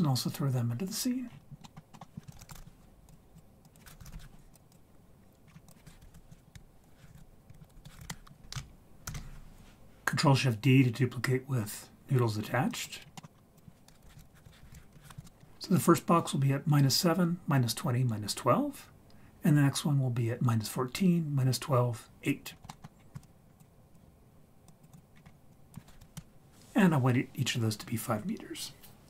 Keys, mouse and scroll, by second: 1.2-1.7 scroll down 3, 1.6 middle click, 1.9 middle click, 2.3 shift+a, 3.6 click, 5.4-6.5 scroll up 4, 5.7 click, 8.4 ctrl+z, 9.0 ctrl+shift+d, 13.0 scroll down 3, 13.2 middle click, 13.3 scroll up 2, 13.5 click, 15.6-18.9 scroll up 2, 22.4-23.1 scroll down 3, 22.7 middle click, 23.2-23.6 drag, 23.9 click, 24.7 click, 25.1-25.5 scroll up 4, 25.5 click.